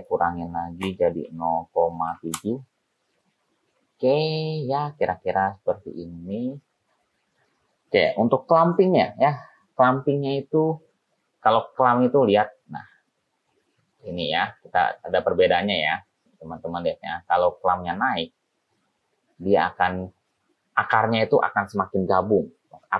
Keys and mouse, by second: 8.7 click, 11.6-14.3 drag, 14.3-15.3 middle drag, 15.3 click, 15.6 click, 16.1-17.3 middle drag, 18.2-20.0 middle drag.